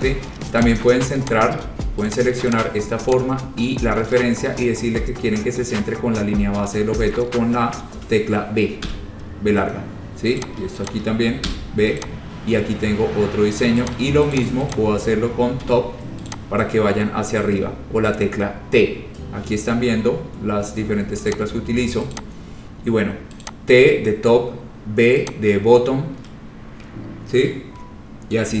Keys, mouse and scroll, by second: 0.4 scroll, 0.8 click, 1.5 click, 2.3 click, 2.6 click, 2.6 y, 2.8 shift+click, 3.3 shift+click, 8.8 shift+click, 9.0 b, 10.6 click, 11.1 shift+click, 11.6 b, 12.1 click, 14.0 click, 14.5 shift+click, 14.9 shift+click, 15.8 t, 16.4 click, 17.9-19.1 scroll, 21.5 click, 22.4 click, 22.6-23.2 scroll, 23.6 click, 25.5 click.